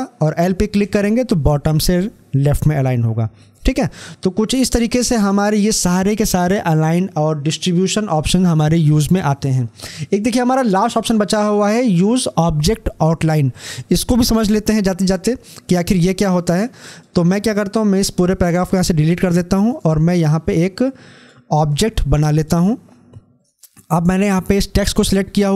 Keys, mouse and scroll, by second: 0.5 b, 15.8 l, 19.4-22.2 drag.